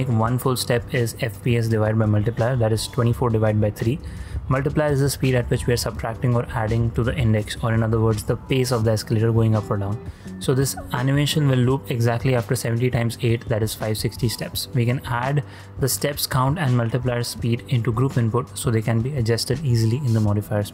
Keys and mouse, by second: 7.6 click, 8.8 click, 9.1 click, 11.1 click, 14.8-16.2 drag, 17.0 shift+middle click, 17.3 shift+space, 17.9 shift+space, 18.1 shift+click, 18.8 n.